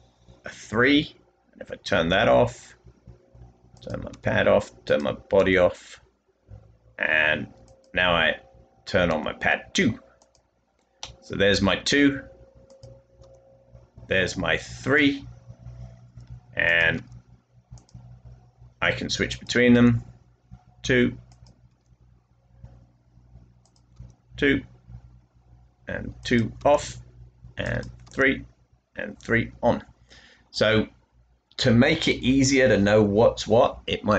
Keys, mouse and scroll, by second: 2.0 typing, 4.0 typing, 5.3 typing, 9.0 typing, 13.1 typing, 16.9 typing, 19.6 typing, 21.6 typing, 23.9 typing, 26.5 typing, 28.2 typing, 30.8-31.5 typing.